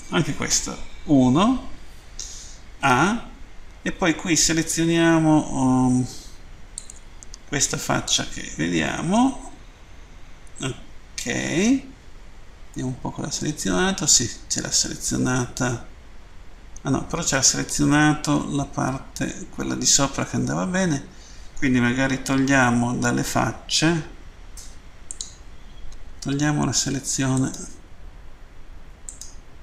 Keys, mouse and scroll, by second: 6.8 click, 12.7 middle click, 25.1 click, 27.4 alt+right click, 29.1 alt+right click.